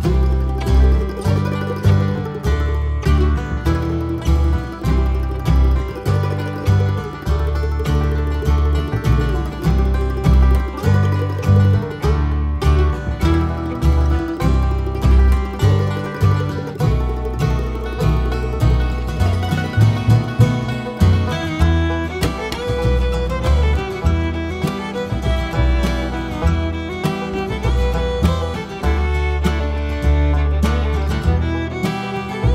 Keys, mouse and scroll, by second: 0.2 `, 1.4-6.4 drag, 6.6 scroll down 1, 6.7 `, 7.0 scroll up 1, 7.2 click, 7.3 Tab, 7.5 `, 8.1 alt+click, 8.4 `, 9.2 alt+click, 10.0 `, 10.7 alt+shift+click, 11.0 `, 11.7 alt+shift+click, 11.9 `, 12.8 ctrl+z, 15.3 scroll down 1, 15.4 Tab, 15.5 `, 15.9 scroll up 1, 16.2 `, 16.4 scroll up 1, 16.6 `, 18.0 click, 19.4-23.0 drag, 20.6 `, 24.8 `, 25.6-29.0 drag, 28.4 `, 31.0-32.2 drag.